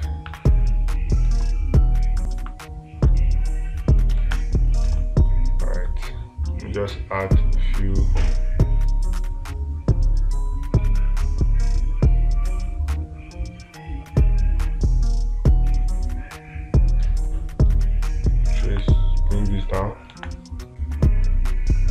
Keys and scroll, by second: 0.4 space, 4.6 space, 20.6 space.